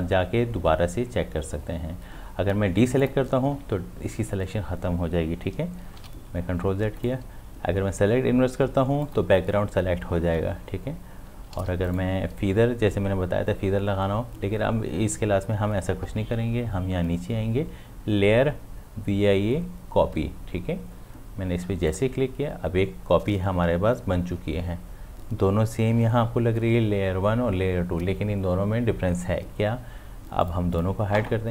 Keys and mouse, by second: 3.0 click, 5.9 click, 6.0 ctrl+z, 7.0 right click, 9.0 click, 11.6 ctrl+z, 11.9 right click, 21.9 right click, 21.9 click, 30.4 click.